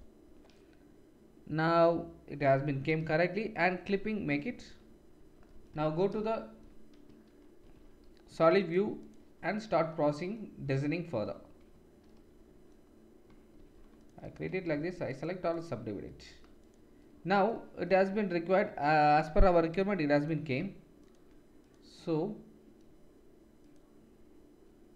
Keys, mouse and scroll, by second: 0.0-3.6 drag, 3.6-6.6 middle drag, 5.8 shift+z, 7.6 ctrl+r, 13.3-15.2 ctrl+middle drag, 13.5 ctrl+r, 14.7 a, 15.2-24.9 drag, 16.6 middle click, 16.6 right click, 19.7 3, 21.0 shift+middle click, 21.0 shift+right click, 23.6 middle click, 23.6 right click.